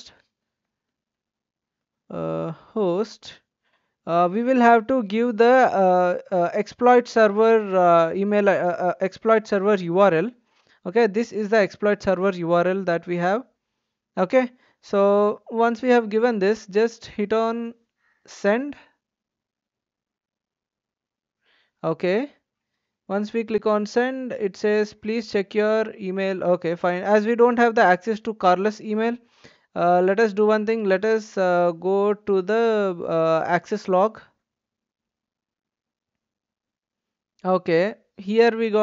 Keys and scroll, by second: 0.0-4.1 typing, 9.3 ctrl+v.